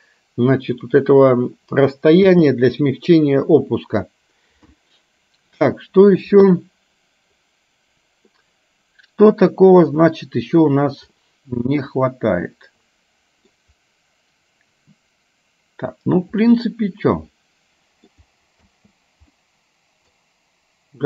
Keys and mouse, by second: 2.3 space, 11.8-13.6 middle drag, 16.4-18.2 middle drag, 18.8 space, 19.4-20.4 middle drag.